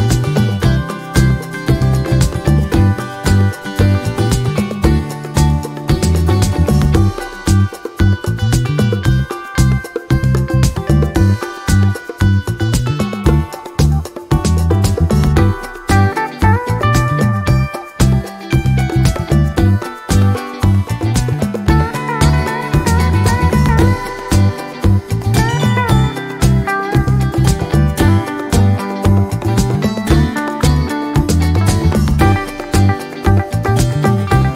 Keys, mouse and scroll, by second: 0.7 ctrl+z, 1.7 click, 3.6 click, 4.5 ctrl+shift+g, 5.7-6.7 drag, 7.9 ctrl+g, 8.7 ctrl+click, 9.5 shift+click, 10.4 ctrl+shift+g, 11.9 ctrl+shift+click, 13.1 ctrl+shift+click, 14.3 ctrl+shift+click, 15.6-17.1 ctrl+shift+drag, 17.2-18.5 ctrl+shift+drag, 18.8 click, 19.9 click, 20.6 click, 21.8-24.6 drag, 25.4 click, 26.4-28.2 drag, 28.4 click, 28.7 click, 29.4 click, 30.5-31.9 drag, 32.1-32.5 ctrl+scroll down 2, 32.6 ctrl+middle click, 33.6-34.5 ctrl+drag.